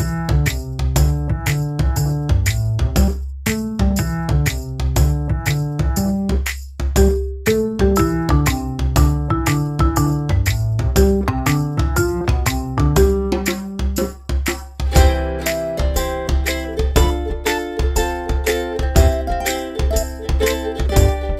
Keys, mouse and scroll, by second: 0.8 click, 2.0 ctrl+a, 3.4-3.8 typing, 4.1 Return, 6.1 click, 13.6 shift+click, 15.2 shift+click.